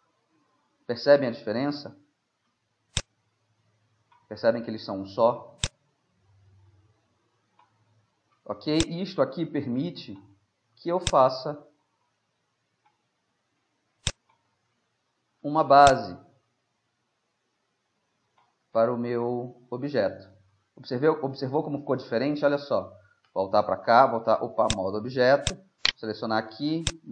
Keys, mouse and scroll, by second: 2.0 middle click, 3.0-4.7 drag, 4.7 click, 4.9 middle click, 5.7-7.6 drag, 7.8-8.8 middle drag, 8.8-10.5 drag, 10.7 middle click, 11.1-13.0 drag, 13.1 middle click, 14.1-17.8 drag, 18.6-20.0 middle drag, 20.8 middle click, 23.3 Tab, 23.9 Tab, 24.7-26.6 drag, 25.6 Tab, 25.9-27.1 right drag, 26.9 click.